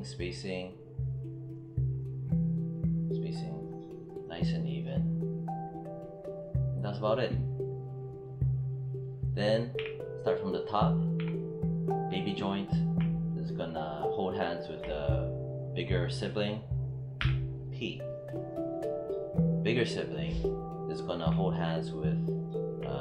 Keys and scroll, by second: 9.6 w, 11.0 q, 17.1 p.